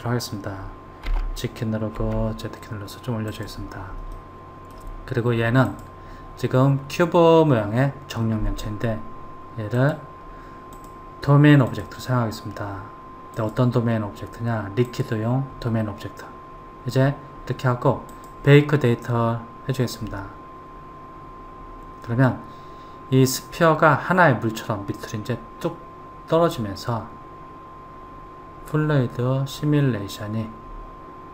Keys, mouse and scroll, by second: 1.1 g, 4.1-5.7 middle drag, 5.7 click, 9.8 click, 10.8-16.4 drag, 18.1-31.3 drag.